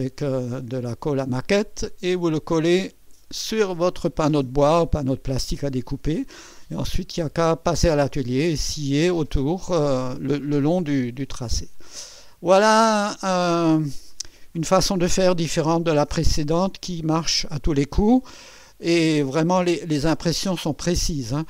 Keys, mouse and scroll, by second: 18.8-19.8 middle drag.